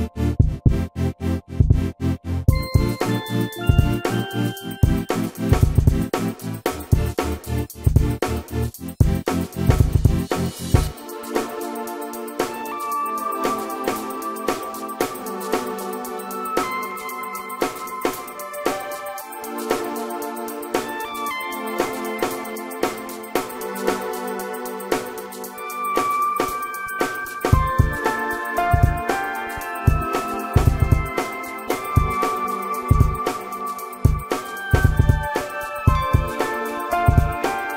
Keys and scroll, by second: 1.8 m, 3.3 space, 10.8 g, 24.4 space, 27.3 p, 29.1-30.5 typing, 32.1 p, 34.2 space, 35.6 ctrl+g.